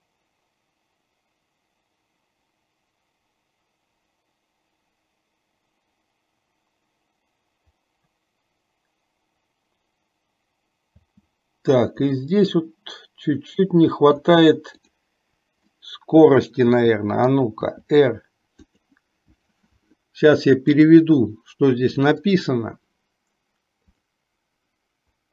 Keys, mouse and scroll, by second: 11.2 space, 12.4-17.5 middle drag, 18.0 r, 21.0-25.3 drag.